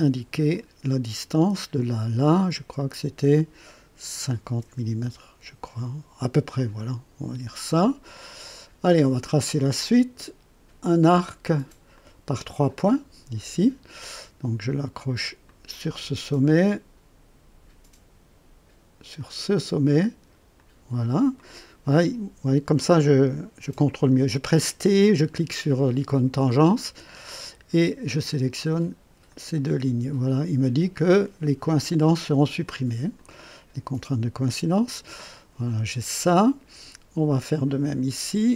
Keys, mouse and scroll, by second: 0.3 click, 1.7 click, 2.7 click, 4.3 KP_5, 4.6 KP_0, 5.0 KP_Enter, 6.8 right click, 8.2 right click, 11.9 click, 12.8 click, 15.4 click, 19.2 click, 20.5 click, 21.4 right click, 26.8 t, 28.0 click, 29.2 click, 33.1 click, 37.8 click.